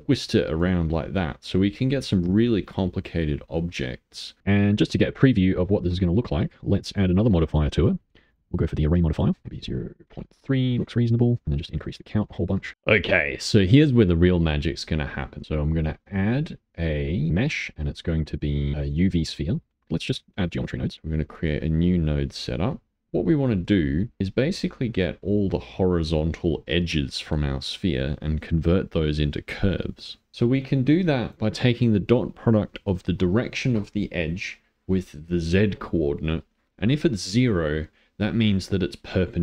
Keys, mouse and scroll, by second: 2.4-3.5 middle drag, 3.5 click, 4.4 middle click, 4.8-5.5 scroll up 4, 5.5-6.9 shift+middle drag, 8.3 click, 9.2 middle click, 9.4-12.3 drag, 12.3 middle click, 14.7 middle click, 15.4-17.2 drag, 19.4 middle click, 22.3 click, 22.4 middle click, 22.9 scroll up 1, 23.0 middle click, 23.6 click, 24.2-30.0 middle drag, 30.7 click.